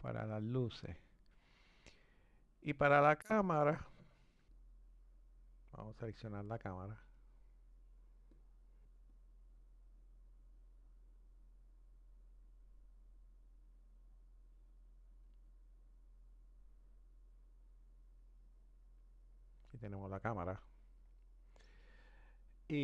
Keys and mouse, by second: 4.4-8.4 drag, 10.1 click, 10.3 click, 15.5-18.5 middle drag.